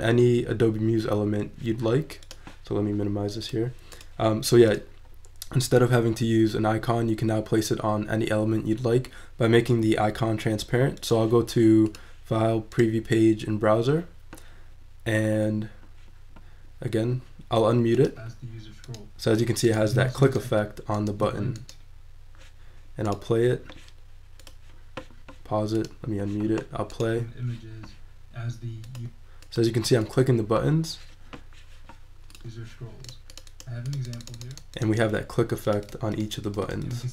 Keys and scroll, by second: 2.2 n, 2.5 p.